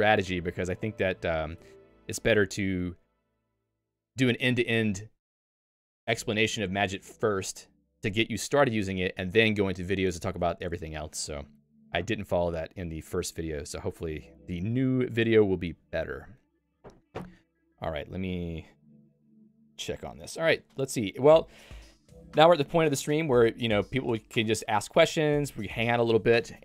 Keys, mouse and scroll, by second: 1.3 click, 2.3 Escape.